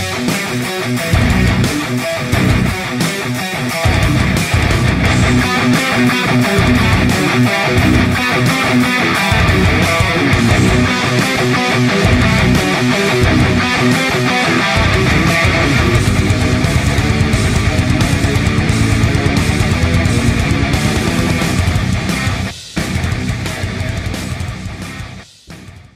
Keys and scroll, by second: 0.0 Tab, 0.3 space, 1.2 c, 1.8 ctrl+space, 2.5 c, 6.4 space, 19.1 alt+shift+space.